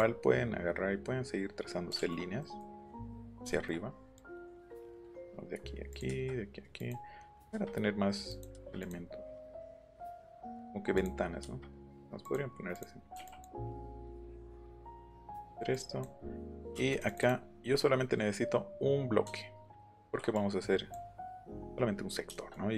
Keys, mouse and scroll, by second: 2.4 middle click, 3.1 middle click, 4.2 click, 5.0 click, 5.9 click, 6.8 click, 7.3 click, 7.5 Escape, 8.3 click, 8.8 click, 9.4 click, 10.4 click, 11.0 click, 12.2 click, 12.7 click, 13.2 e, 13.3 click, 13.7 click, 14.0 click, 14.4 click, 14.8 click, 15.2 click, 15.7 click, 16.3-17.3 scroll up 8, 18.0 scroll up 2, 20.0 ctrl+n, 20.3 click, 22.3 shift+middle click.